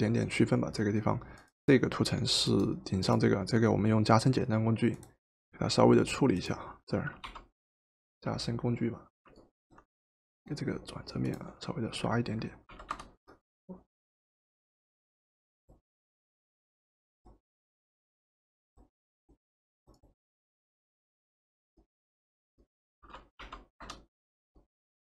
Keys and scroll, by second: 7.2 o, 12.8 v, 23.4 o.